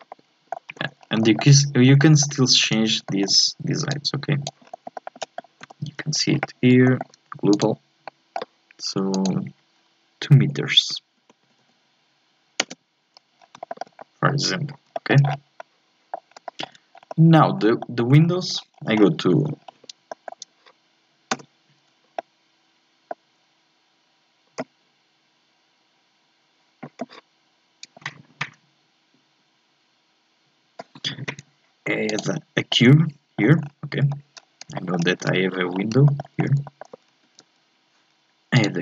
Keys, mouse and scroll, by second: 0.1 middle click, 0.7 Tab, 1.0 scroll up 1, 1.2-2.6 shift+middle drag, 2.6 right click, 3.1 shift+middle click, 3.9 click, 4.6-4.9 scroll down 1, 4.9 shift+middle click, 5.0 shift+scroll up 1, 5.2 middle click, 5.6 n, 6.9 shift+middle click, 7.5 click, 8.1-9.2 middle drag, 9.2-11.6 drag, 11.6 KP_0, 13.4 scroll down 4, 13.7 shift+middle click, 14.4 Tab, 14.9 shift+middle click, 15.3-15.6 scroll down 3, 15.6 middle click, 16.3 scroll down 1, 16.4-17.1 scroll up 4, 16.5 shift+middle click, 17.1 middle click, 17.5 scroll down 2, 17.8 shift+middle click, 18.0 shift+scroll up 1, 18.2 scroll down 1, 18.7 scroll up 4, 19.0-19.6 scroll down 2, 19.6 scroll up 4, 20.1-21.4 shift+middle drag, 21.4 n, 22.2-25.2 shift+middle drag, 32.1 click, 32.7 middle click, 33.6 scroll down 3, 34.0 KP_7, 34.3 scroll up 1, 34.7 shift+middle click, 35.2 z, 35.7 scroll up 3, 36.1 shift+middle click, 36.4-36.8 scroll up 2, 36.7 shift+middle click, 37.2 shift+a.